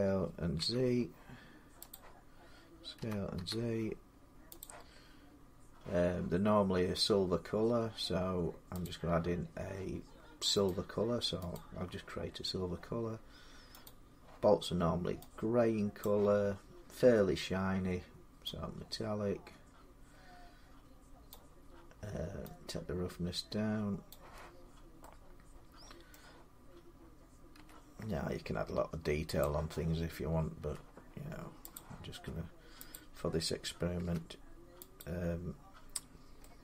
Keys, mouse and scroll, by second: 0.4 z, 1.7 click, 2.8-3.1 typing, 4.4 click, 8.6 click, 10.4 click, 12.4 click, 13.6 click, 15.8 click, 21.1 click, 23.8 click, 24.4 scroll, 25.9-29.2 middle click, 27.3 s, 29.2 click, 29.6-30.4 scroll, 30.4 s, 31.5 click, 31.9 middle click, 31.9 s, 32.7 click, 33.8 h, 34.8 click.